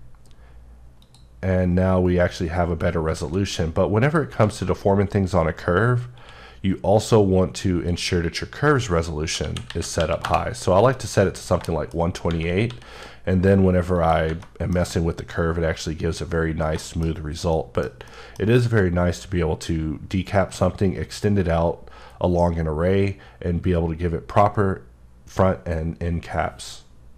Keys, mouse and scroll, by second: 1.0 click, 3.1 alt+z, 4.0 click, 4.4 alt+z, 5.1-6.2 scroll up 1, 6.2 q, 7.0 click, 8.3 click, 9.4 KP_1, 9.7 KP_2, 10.0 KP_8, 10.3 KP_Enter, 11.2-11.6 scroll down 2, 11.7 shift+middle click, 12.7 s, 14.0 click, 14.4 middle click, 18.1 middle click.